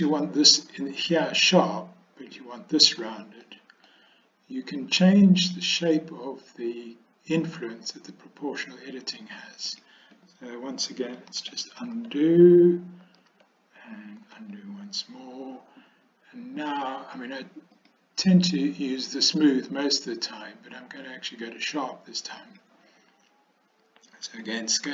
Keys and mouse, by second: 3.6 middle click, 5.6-9.5 drag, 9.7 click, 11.4 ctrl+z, 12.0 ctrl+z, 13.3 ctrl+z, 14.3 ctrl+z, 17.9-22.9 drag.